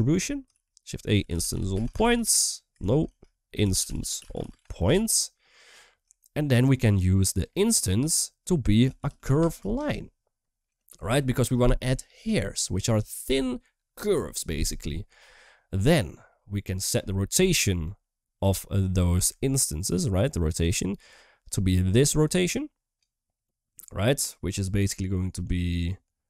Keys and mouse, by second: 0.5 shift+a, 3.0 shift+a, 5.4 typing, 5.9 shift+click, 7.2-10.7 drag, 16.3 middle click, 17.6 click, 17.9 click, 18.8 middle click, 20.6 middle click, 21.9-22.8 drag, 25.2-26.2 middle drag.